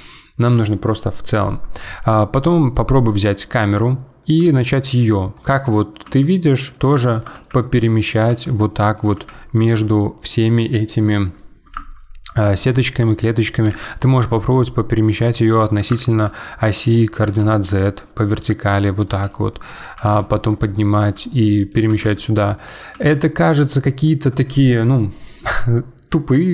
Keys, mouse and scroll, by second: 2.4 click, 2.7-4.4 middle drag, 4.4 g, 5.6 middle click, 6.0 g, 6.9 scroll up 1, 7.0 shift+middle click, 7.3 g, 8.3 g, 9.1 g, 9.9-13.6 middle drag, 13.6 g, 15.5-17.2 middle drag, 17.2 g, 19.1 g, 20.6-21.0 middle drag, 21.0 g, 21.9 g, 23.5 g.